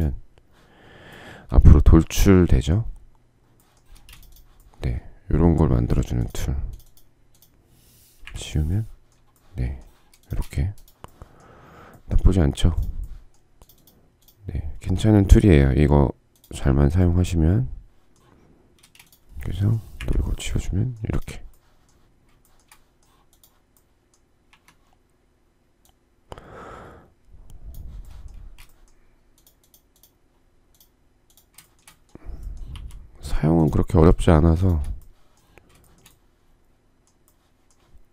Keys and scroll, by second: 3.5 space, 7.8 Delete, 9.5 space, 10.0 Escape, 10.9 space, 18.4 space, 19.6 Delete, 24.1 q, 28.0 space.